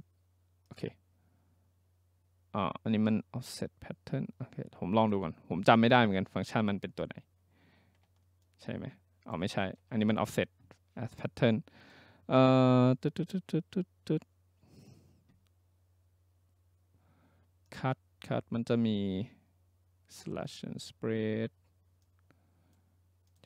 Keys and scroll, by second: 9.6 ctrl+z.